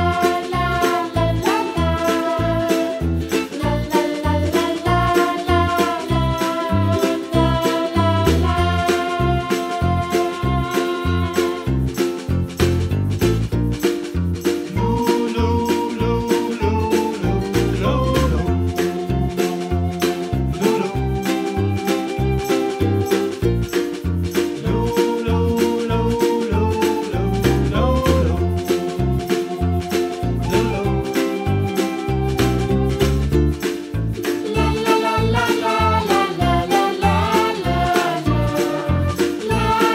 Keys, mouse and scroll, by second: 0.2 middle click, 0.3 Delete, 0.6 click, 1.3 r, 3.5 g, 5.4-7.1 middle drag, 7.1 shift+click, 7.8 shift+d, 9.9 KP_Decimal, 10.4-11.1 scroll down 1, 11.1-12.0 drag, 12.0 r, 14.0-14.7 middle drag, 14.7 g, 16.3 g, 17.7 g, 18.3 shift+a, 20.9 g, 21.7 KP_Decimal, 21.9-22.4 scroll down 5, 22.4 s, 23.0-23.4 middle drag, 23.4 s, 24.2 middle drag, 24.4-24.8 scroll up 2, 24.8 Tab, 25.3 ctrl+r, 28.9 g, 30.4 scroll up 1, 30.7-32.0 middle drag, 32.4 ctrl+r, 35.2 middle click, 35.7 ctrl+r, 36.6 click, 37.7 ctrl+r, 38.6 3, 38.6 alt+shift+click, 38.8 s.